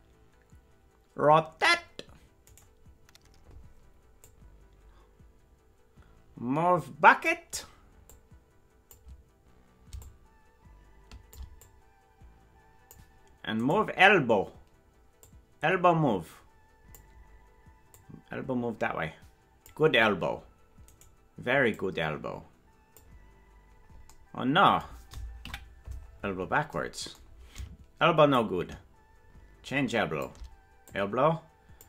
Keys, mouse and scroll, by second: 2.6-4.2 right drag, 4.2-7.3 drag, 8.1 click, 10.0-11.4 shift+drag, 11.6-13.0 drag, 13.7 right click, 15.2-17.0 drag, 17.9-19.7 drag, 21.0 right click, 21.7-23.0 drag, 25.4 KP_Decimal, 26.1-26.4 scroll down 4, 26.2 scroll up 1, 26.4-26.9 scroll down 6, 28.3-30.3 shift+drag, 30.8-31.8 drag.